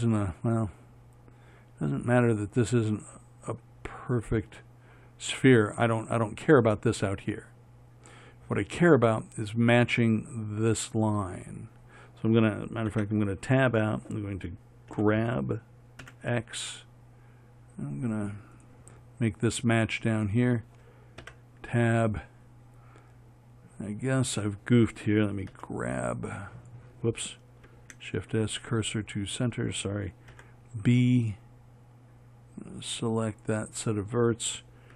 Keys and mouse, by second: 13.2 Tab, 15.2 g, 21.5 Tab, 25.8 g, 26.4 click, 30.6 b.